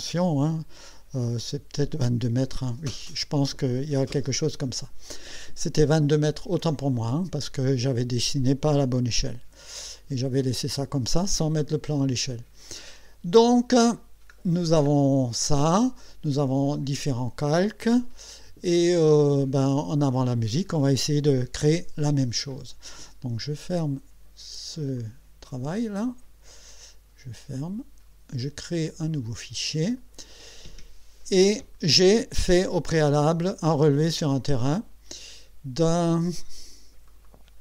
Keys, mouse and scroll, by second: 9.4 Escape, 9.9 click, 10.4 Escape, 11.5 scroll down 2, 12.3 scroll up 2, 12.9 middle click, 14.0-14.3 scroll up 2, 14.5 scroll down 2, 15.3-15.7 scroll down 2, 16.0 middle click, 18.9 scroll down 2, 25.0 click, 27.5 click, 29.1 click, 33.4 click, 37.1 click.